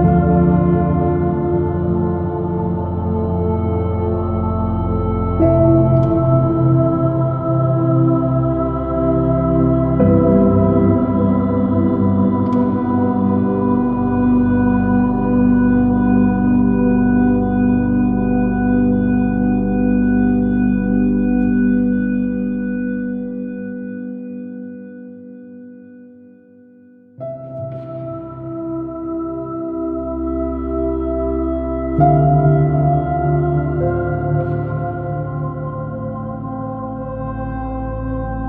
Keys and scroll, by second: 2.6 super+-, 4.5 super+i, 4.7 super+space, 6.1 s, 7.1 j, 15.8 super+z, 17.2 space, 23.3 space, 25.1 super+z, 29.9 space, 36.3 space.